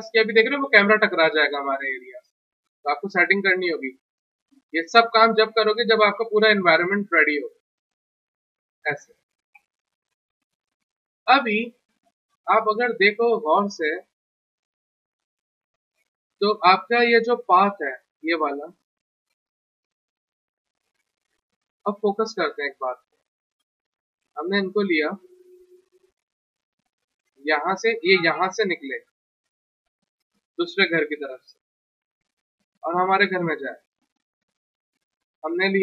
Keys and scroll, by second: 13.7 F3, 15.1 p, 20.9 w, 21.2 t, 22.4 F3, 23.8 1, 34.0 1.